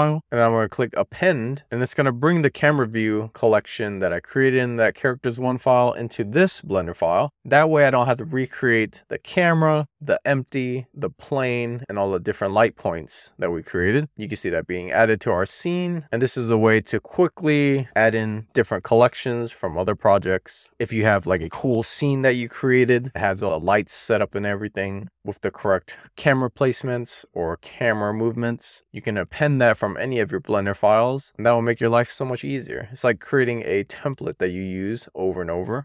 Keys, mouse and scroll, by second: 5.4-7.6 scroll down 4, 7.8 click, 10.2-11.1 scroll up 2, 11.1-11.6 scroll down 2, 11.6-12.6 middle drag, 14.0-14.8 scroll up 1, 14.8-15.6 scroll up 1, 15.6-19.0 scroll down 1, 19.4 KP_0, 34.3 click, 35.7-35.8 middle drag.